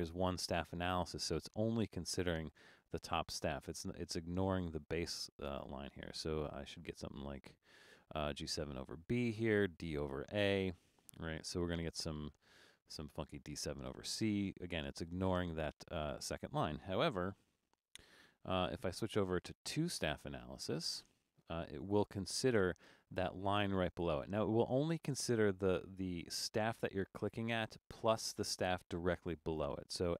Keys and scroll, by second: 17.2 BackSpace.